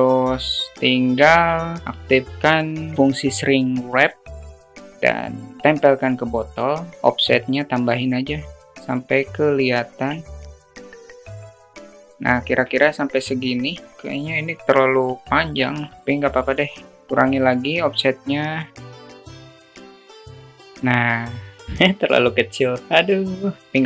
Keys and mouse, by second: 1.3 alt+middle click, 1.9-4.3 drag, 6.9 alt+middle click, 8.6 click, 9.3-10.0 alt+middle drag, 10.7 click, 12.2 alt+middle click, 13.1 click, 16.0 alt+middle click, 17.1 ctrl+z, 17.1-18.3 drag, 18.5-19.7 drag, 19.9 alt+middle click, 20.3 click, 20.7 alt+middle click.